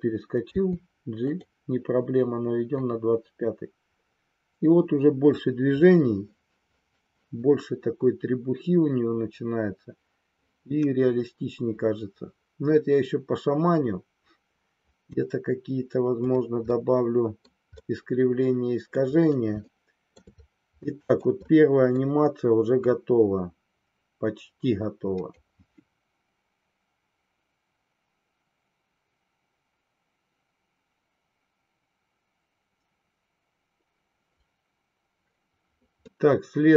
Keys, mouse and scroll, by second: 0.5 g, 1.3 drag, 2.9-15.3 drag, 16.3 click, 16.6-17.5 middle drag, 17.8-19.1 middle drag, 19.7-20.1 shift+middle drag, 20.9 shift+middle click, 21.5 middle click, 22.9-25.4 drag, 36.1-36.7 middle drag.